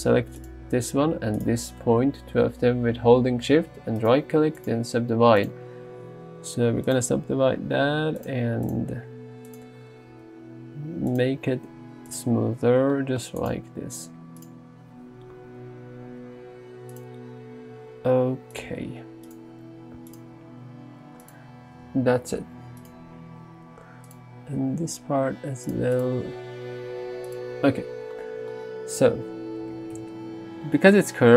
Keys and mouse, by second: 0.5 click, 4.1 right click, 6.3 s, 6.9 click, 7.3 g, 8.2-9.4 drag, 10.2 g, 11.1 click, 13.5 click, 15.4 f, 16.3 g, 17.0 click, 18.1 r, 18.7 g, 19.3 right click, 20.2 click, 20.4 g, 21.3 click, 24.1 click, 24.9 g, 26.3 g, 29.0 alt+z, 29.7 alt+z, 30.0 Tab.